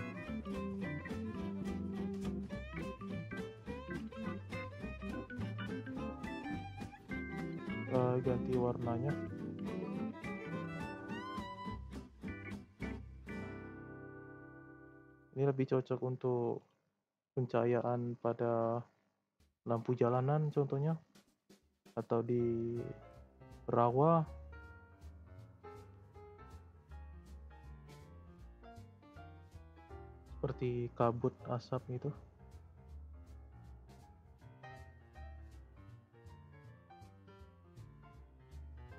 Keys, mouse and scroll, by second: 0.2-1.1 shift+middle drag, 1.1-1.4 scroll down 2, 3.4 click, 3.9 click, 5.9-9.0 drag, 9.3 click, 14.9 click, 15.6 click, 16.5 click, 17.1 click, 26.8 click, 34.8 click, 35.3 shift+middle click, 35.7-36.4 shift+scroll up 1, 36.7-38.9 drag.